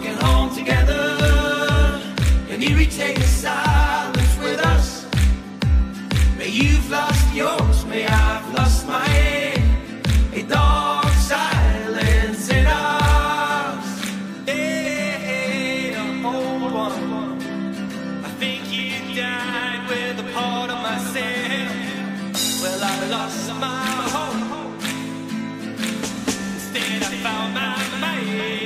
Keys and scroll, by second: 2.9 !, 7.1 i, 8.9 b, 11.3 b.